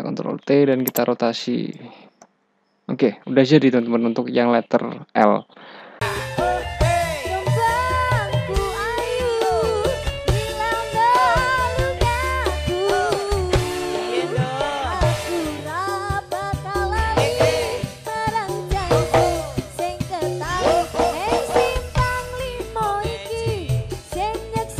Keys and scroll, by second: 0.4 ctrl+t, 2.3 Return.